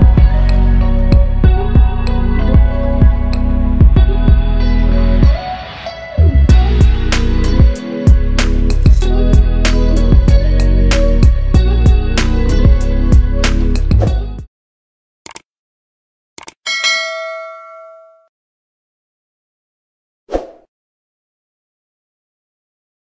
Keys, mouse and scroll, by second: 3.7-4.4 scroll down 1, 4.4 click, 4.6-5.3 scroll down 1, 5.3 click, 5.6-6.1 scroll down 1, 6.9-8.5 drag, 7.0-8.5 typing.